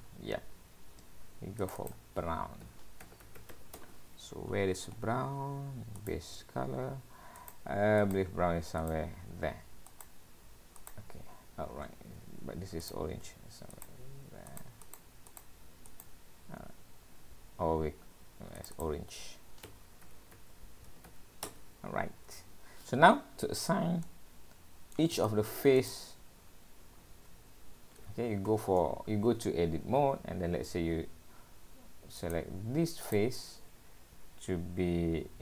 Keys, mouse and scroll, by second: 1.7 click, 2.2 click, 4.5-5.4 scroll down 9, 6.0 click, 12.0 scroll up 1, 12.9 click, 17.3-18.4 scroll up 2, 18.4 scroll up 3, 18.6 click, 18.7 click, 24.0 middle click, 25.1 click, 25.2 middle click, 26.0 click, 26.5-27.0 scroll down 3, 27.0-27.7 scroll up 5, 28.0 scroll down 1, 28.5 Tab, 30.3-31.0 scroll up 1, 31.0-31.3 scroll up 1, 32.2 click, 33.0 click.